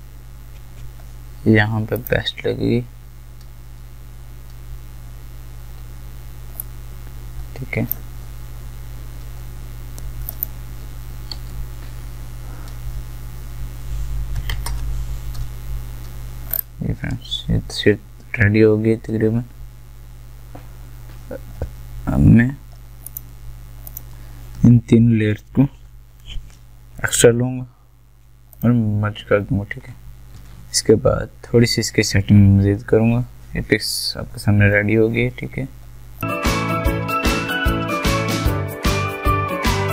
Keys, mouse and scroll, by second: 6.9-10.3 drag, 18.8 scroll up 1, 21.6 ctrl+Num_Lock, 21.6-22.1 scroll up 1, 23.1 ctrl+click, 25.8 ctrl+j, 27.0 right click, 28.5 click, 30.3 ctrl+shift+a, 36.2 click.